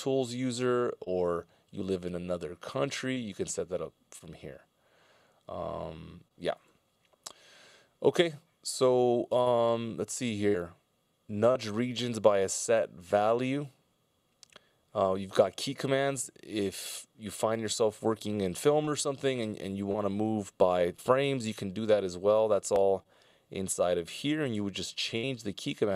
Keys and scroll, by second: 24.4 alt+k.